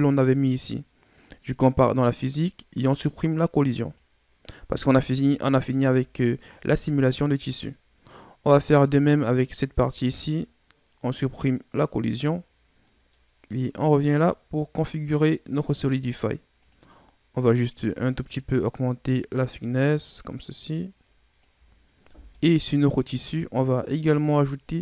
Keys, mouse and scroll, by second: 2.0 click, 3.7-5.3 drag, 5.3-6.2 scroll up 5, 6.2-6.5 scroll down 1, 6.5-8.3 middle drag, 8.3-9.3 scroll up 2, 9.3 right click, 11.6-12.4 drag, 12.4-12.7 scroll down 1, 12.7-13.3 middle drag, 13.3 scroll up 2, 13.8 right click, 15.4 click, 16.5-20.9 drag, 21.7-22.0 scroll down 2, 22.0-22.8 middle drag, 22.8 right click, 24.5-24.8 drag.